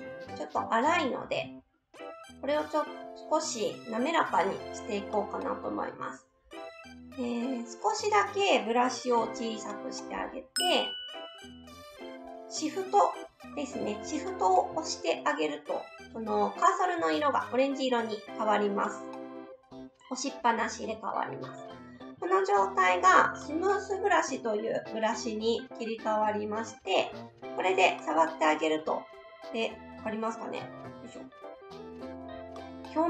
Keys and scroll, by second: 9.2 s.